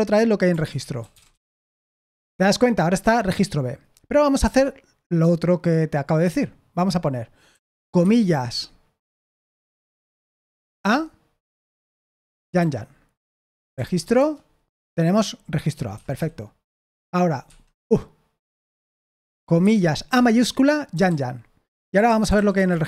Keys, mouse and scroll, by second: 0.7-1.7 typing, 6.1 Escape, 7.5-7.9 typing, 10.5 typing, 12.3-14.5 typing, 15.8-16.6 typing, 17.4 Escape, 19.8-22.8 typing.